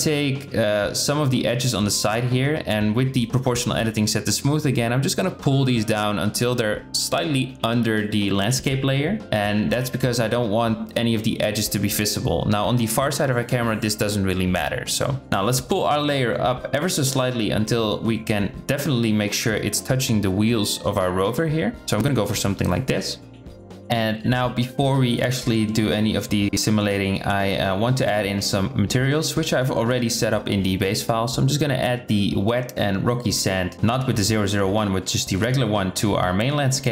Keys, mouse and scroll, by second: 2.0 g, 5.1 g, 6.5 g, 7.5 g, 8.3 click, 8.8 g, 9.5 click, 10.0 g, 10.3 g, 11.3 g, 11.5 click, 11.7 g, 13.4 Tab, 14.9 shift+middle drag, 16.2 shift+middle click, 17.0 g, 26.2 Tab, 26.6 click, 27.3 shift+drag, 30.1-35.1 drag.